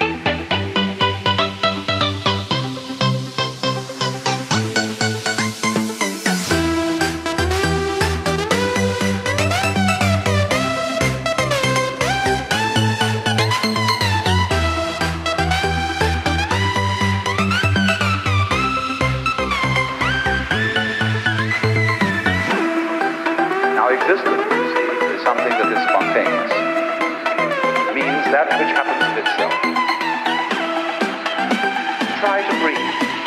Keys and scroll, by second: 19.1 ctrl+=.